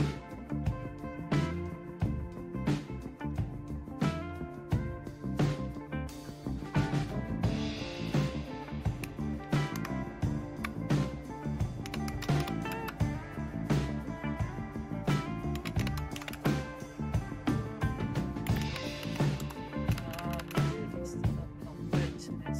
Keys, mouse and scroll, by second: 3.3-9.7 drag, 9.7 super+Right, 11.6-12.9 typing, 15.3-16.6 typing, 18.2-20.4 typing, 19.3 Tab.